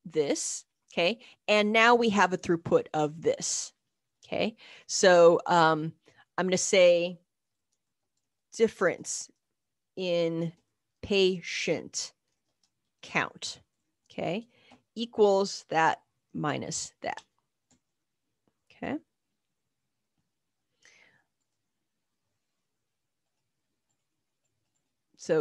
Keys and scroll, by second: 7.3 Right, 7.3-14.7 typing, 15.8 Up, 15.8 -, 16.3 Up, 16.3 Left, 17.1 Return, 18.3-19.2 typing, 23.5-24.3 typing.